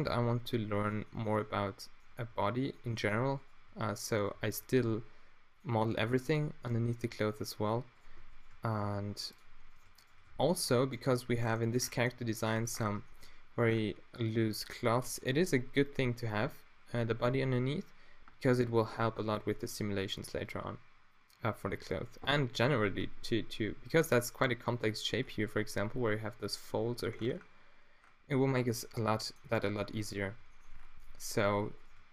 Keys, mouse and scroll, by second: 0.0 g, 1.7-2.9 drag, 2.3 g, 3.3-4.3 middle drag, 4.3-5.6 right drag, 4.7 g, 5.6 middle click, 5.8-6.8 drag, 8.8 x, 10.2 f, 10.9 middle click, 11.3 middle click, 12.2 middle click, 23.9-25.2 middle drag, 25.2 middle click, 31.8-32.1 drag.